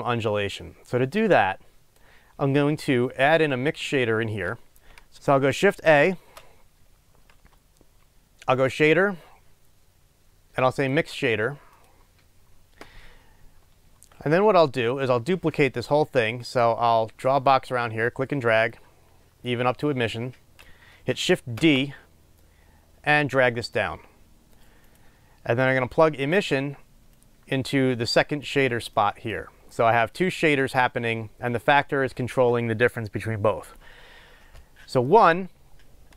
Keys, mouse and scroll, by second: 11.9 click, 21.6 shift+d, 28.6 click, 29.5 scroll up 1.